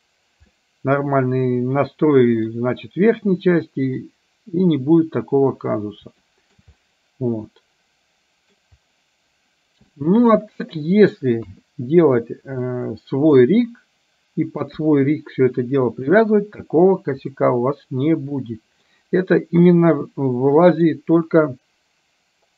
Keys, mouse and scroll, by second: 0.6-2.6 middle drag, 6.3 shift+middle click, 6.8-8.6 middle drag, 10.0-10.3 shift+middle drag, 11.5 KP_3, 12.7-13.5 middle drag, 14.7 KP_1, 17.5-19.0 middle drag, 19.8-21.0 middle drag.